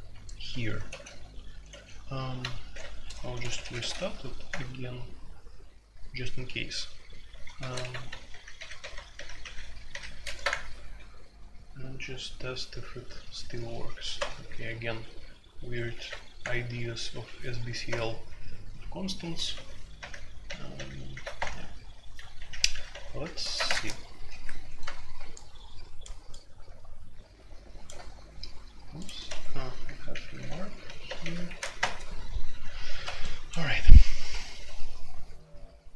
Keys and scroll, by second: 0.9 ctrl+d, 1.7 ctrl+d, 2.7 alt+2, 3.1-3.8 typing, 4.5 Return, 7.6 ctrl+c, 7.8 alt+o, 8.3 alt+p, 8.5 alt+p, 8.8 alt+p, 9.1 alt+p, 10.2 alt+n, 10.5 Return, 14.1 typing, 15.9 alt+p, 16.4 Return, 17.9 0, 19.3 alt+p, 19.5 alt+p, 19.9 alt+p, 20.4 alt+p, 20.7 alt+p, 21.3 Return, 22.3 alt+p, 22.5 alt+p, 22.9 alt+p, 23.4 alt+n, 23.6 Return, 29.2 Escape, 30.1-31.4 typing, 31.8 Return.